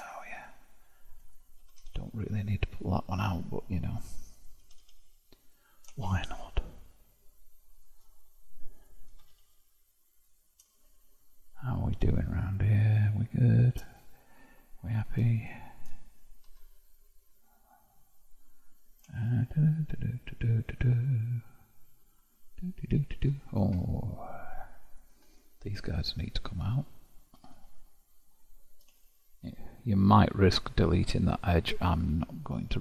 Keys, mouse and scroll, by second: 1.2 click, 1.6 g, 4.4 click, 4.6 g, 6.0-8.8 shift+middle drag, 8.8 click, 9.2 g, 10.8-13.8 shift+middle drag, 15.0 click, 16.6 0, 19.2-24.9 shift+middle drag, 24.9 click, 25.2 g, 27.0 click, 27.4 g, 29.1-32.1 shift+middle drag.